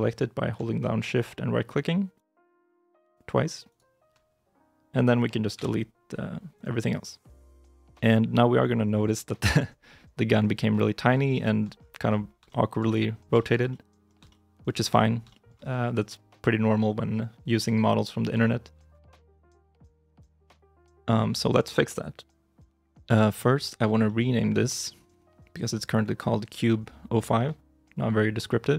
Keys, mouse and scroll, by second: 2.0 shift+right click, 3.5 shift+right click, 5.4 x, 10.7 scroll up 1, 11.2 shift+middle click, 11.6-12.0 scroll up 1, 12.3 shift+middle click, 12.8 scroll up 1, 13.2 shift+middle click, 13.6 shift+middle click, 13.7-14.5 scroll, 14.1 shift+middle click, 14.8-15.5 shift+scroll, 15.2 shift+middle click, 15.5-17.6 shift+scroll up 1, 18.3 shift+middle click, 18.8 scroll up 1, 18.9 middle click, 19.3 shift+middle click, 20.0 shift+z, 23.9 shift+middle click.